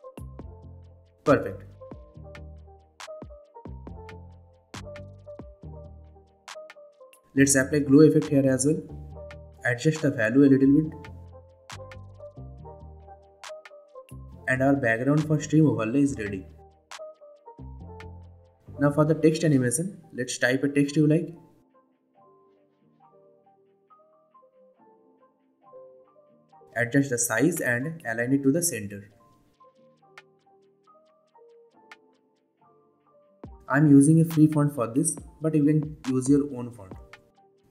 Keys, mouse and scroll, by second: 0.1 Return, 1.9-2.9 drag, 6.6-7.8 typing, 8.8-16.0 drag, 21.5-23.9 typing, 24.8 click, 25.6 s, 27.5-28.4 click, 28.4 shift+drag, 29.0-29.6 drag, 30.7-31.0 shift+drag, 37.2 click.